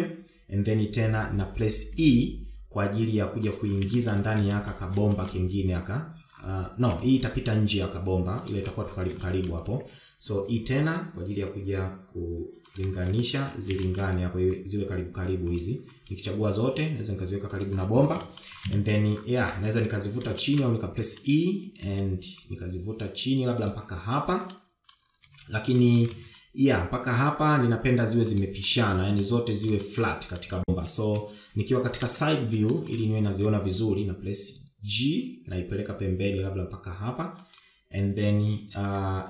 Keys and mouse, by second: 0.3 shift+middle click, 0.8 shift+middle click, 5.5 shift+middle click, 6.0 shift+middle click, 6.6 shift+middle click, 10.7 shift+middle click, 11.9 e, 14.7 shift+middle click, 15.3 shift+middle click, 15.9 g, 17.4 click, 17.8 g, 19.7 shift+middle click, 20.2 shift+middle click, 21.9 shift+middle click, 26.0 middle click, 26.9 shift+z, 27.3 shift+middle click, 27.6 shift+z, 27.8 middle click, 29.8 click, 30.2 shift+middle click, 30.7 middle click, 31.3 shift+middle click, 31.8 middle click, 32.4 KP_1, 33.6 KP_3, 34.3 shift+middle click, 35.4 g.